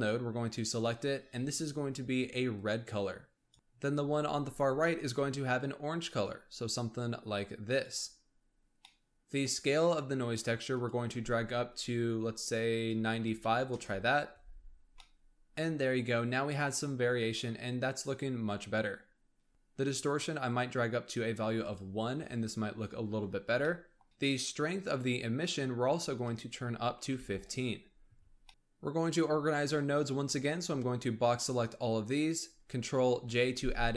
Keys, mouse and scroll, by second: 4.5 click, 8.7-10.6 middle drag, 10.6-13.7 drag, 14.8 scroll down 2, 15.0-15.9 middle drag, 15.9-17.4 scroll up 2, 20.5-21.7 drag, 22.1-22.7 scroll up 3, 22.7-23.6 scroll down 1, 23.6-26.0 ctrl+middle drag, 26.0-27.5 drag, 28.2 scroll down 2, 28.5-29.9 scroll up 1, 30.5 click, 33.1 ctrl+j.